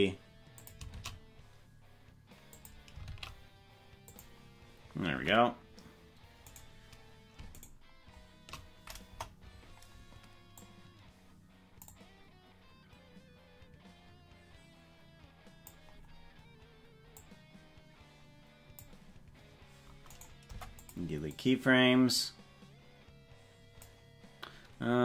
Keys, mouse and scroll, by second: 1.0 shift+d, 3.1 shift+d, 7.0 right click, 9.1 KP_0, 10.6-15.8 drag, 17.1-19.0 drag, 20.1 right click, 20.4 Delete, 21.3-23.8 drag.